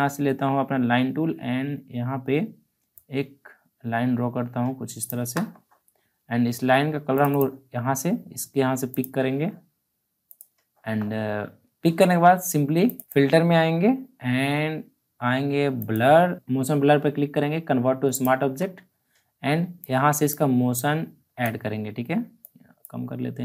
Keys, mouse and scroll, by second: 2.0 click, 2.9-7.1 shift+drag, 12.8 click, 15.8 click, 18.1-23.4 drag.